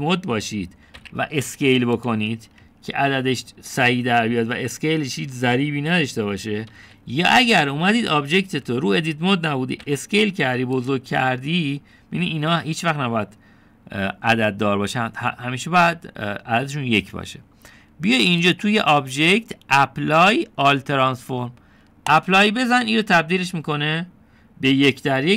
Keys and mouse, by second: 0.7 Tab, 2.0 s, 3.5 Tab, 7.8 ctrl+z, 8.4 ctrl+z, 9.7 Tab, 10.9 s, 19.4-23.3 drag.